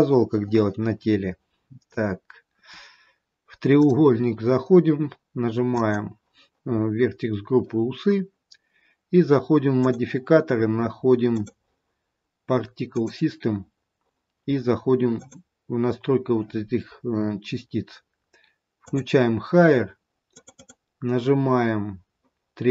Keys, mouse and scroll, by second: 3.7 click, 5.8 click, 9.7 click, 11.2 click, 15.1 click, 19.3 click, 20.6 click.